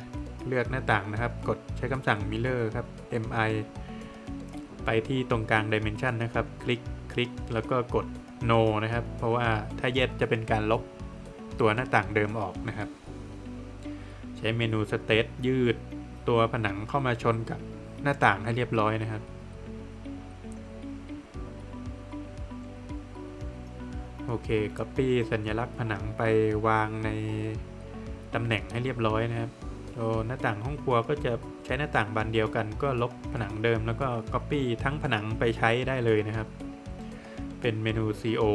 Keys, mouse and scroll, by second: 0.6 scroll down 1, 0.8 middle click, 2.8 space, 4.8 click, 6.7 click, 10.3 Return, 12.9 space, 13.5 click, 13.9 double click, 14.3 scroll up 1, 14.6 space, 15.5 click, 17.2-17.7 scroll down 2, 17.3 Escape, 17.9 middle click, 18.3 scroll down 1, 19.3 middle click, 19.9 scroll down 1, 20.1 middle click, 20.5 Escape, 20.7 click, 22.7 space, 23.1 click, 24.2 click, 24.4 Escape, 24.8 middle click, 25.3 Escape, 25.8 click, 26.3 double click, 27.1 shift+click, 27.5 shift+double click, 28.3 Delete, 28.8 middle click, 29.2 Escape, 30.2 click, 32.9 space, 34.4 click, 36.6 click, 37.0 middle click, 37.7 Escape, 38.4 middle click.